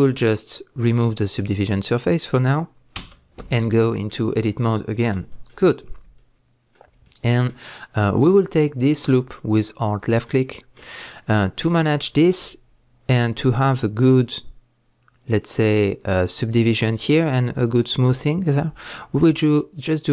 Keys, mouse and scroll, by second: 1.3 click, 1.9-9.5 middle drag, 3.0 Tab, 9.5 alt+click, 10.3-20.1 middle drag.